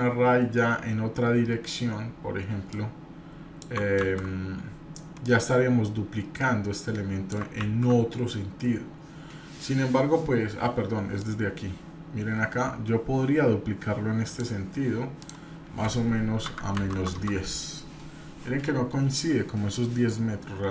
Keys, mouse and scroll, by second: 2.7 click, 4.1 ctrl+z, 5.2-7.3 drag, 7.6 ctrl+z, 9.6-11.2 middle drag, 9.6-11.2 scroll down 2, 11.2-14.5 drag, 11.2-11.8 scroll down 1, 15.2-18.3 drag.